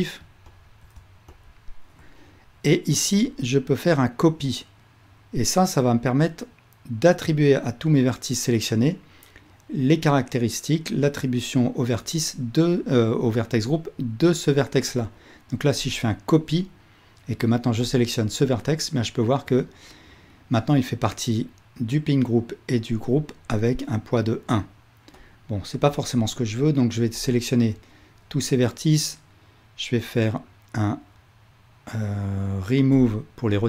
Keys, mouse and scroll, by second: 1.4 shift+click, 15.9-18.0 drag, 25.2 click, 27.2-27.7 ctrl+drag, 33.1-33.6 drag.